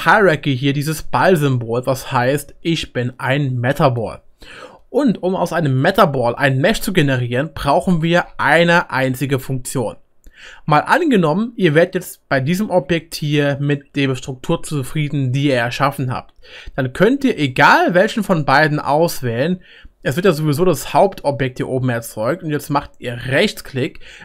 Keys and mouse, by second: 17.4 click, 17.4-24.2 right drag.